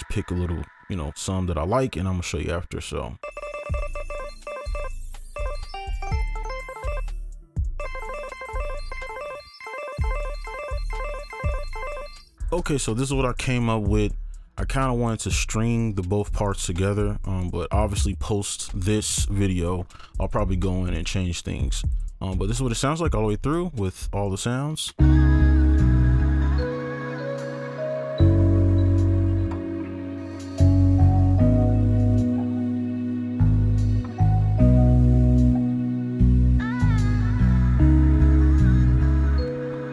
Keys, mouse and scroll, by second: 3.2-5.3 typing, 4.8 right click, 7.0 alt+click, 7.1 right click, 7.3 shift+click, 7.3 shift+right click, 7.4 ctrl+a, 7.5 shift+click, 7.6 right click, 7.6 shift+click, 7.8 space, 8.3 right click, 8.4 space, 8.9 space, 9.0 right click, 9.5 alt+click, 9.6 alt+space, 10.4-12.2 typing, 10.5 alt+click, 11.7 right click, 25.0 space, 29.3 alt+click.